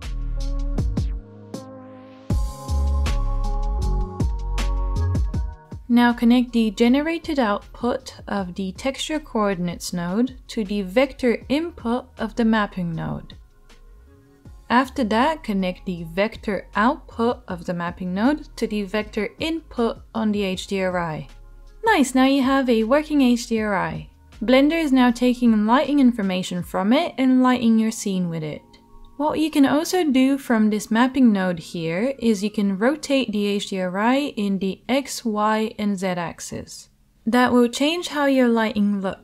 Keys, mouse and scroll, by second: 1.1 shift+a, 4.5 o, 6.9 right click, 7.4-10.7 drag, 10.7-39.2 middle drag, 18.8-31.1 drag, 18.8-31.1 right drag.